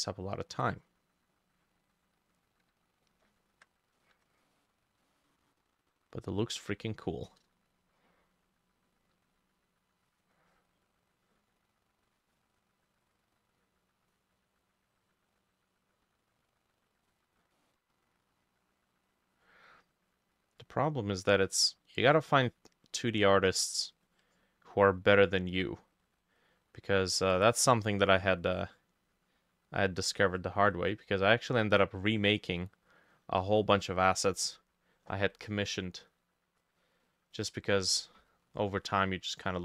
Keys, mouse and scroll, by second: 1.0 double click, 4.0 ctrl+middle click, 4.5 middle click, 5.1 middle click, 17.6-26.8 drag, 17.6 middle click, 21.4 middle click, 27.3-35.5 drag, 27.3 middle click, 27.9 middle click, 38.3-38.7 scroll down 2, 38.9-39.4 scroll down 1, 39.4 scroll up 2.